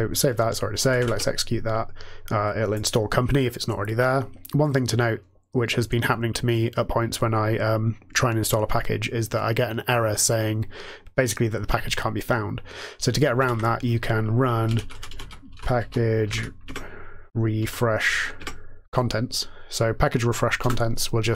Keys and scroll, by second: 0.7 ctrl+x, 0.9 ctrl+e, 13.5 alt+x, 14.3-17.5 typing, 18.3 Tab, 20.5 Return.